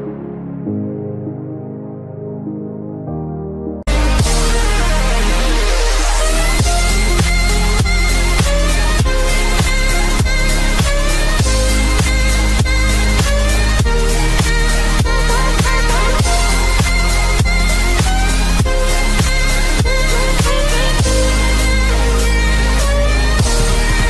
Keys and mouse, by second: 3.1 click, 4.3 click, 9.7 Delete, 12.6 click, 13.7 click, 15.4-16.5 typing, 15.7 click, 18.1 click, 19.6 click, 20.7 click, 22.2 click.